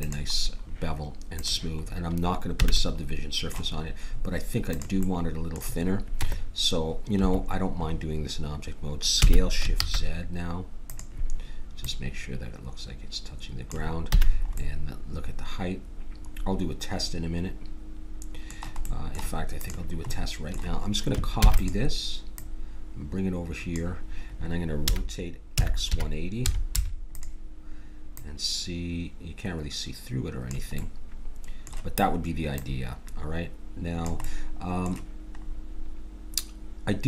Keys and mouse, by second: 1.4 click, 2.7 a, 4.7-7.0 drag, 6.3 Tab, 9.1 s, 11.8-13.6 drag, 14.1 a, 14.3 middle click, 15.2-16.6 middle drag, 19.6-21.4 drag, 21.4 shift+d, 22.4-24.5 drag, 24.9 r, 28.1-29.9 drag, 30.8-32.5 middle drag, 32.5-34.3 drag, 34.3-37.0 middle drag.